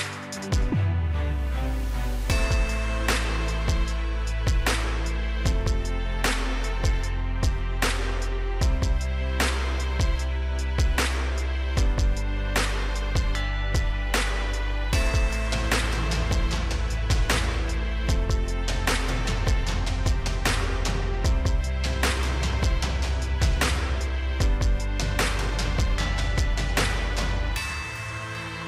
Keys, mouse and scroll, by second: 2.9 3, 3.7 Return, 11.5 2, 12.1 Return, 13.4-28.6 drag.